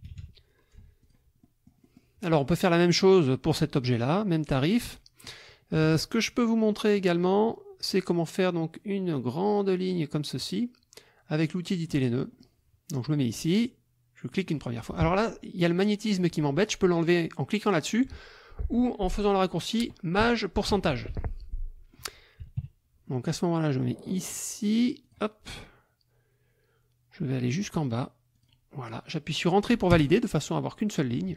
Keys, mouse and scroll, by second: 1.0 F1, 1.0 click, 1.4 click, 4.9 click, 5.8 KP_Subtract, 6.6 click, 11.8 click, 12.3 click, 14.3 click, 15.0 Escape, 21.6 click, 22.6 KP_Subtract, 23.0 click, 25.0 click, 28.3 click, 29.9 Return.